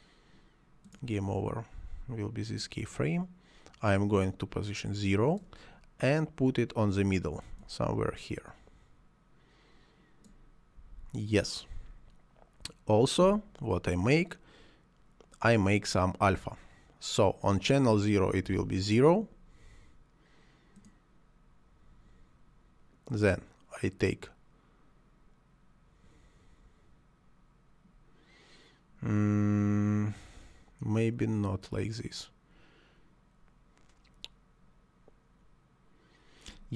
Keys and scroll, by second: 18.4 0, 18.6 Return.